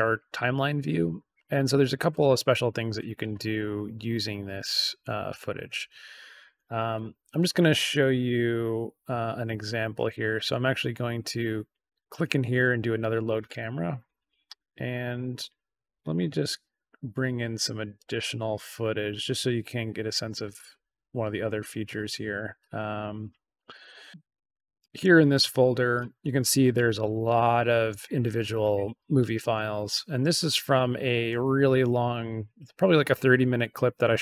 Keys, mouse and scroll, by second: 9.9 right click, 12.6 click, 14.1-14.7 scroll down 4, 16.0 click, 17.9 click, 18.0 click, 23.6 click, 23.7 click, 24.1-24.9 scroll down 2, 25.5-27.3 scroll up 2, 27.6-28.1 scroll down 2, 28.9-29.6 scroll down 2, 29.6 scroll down 1.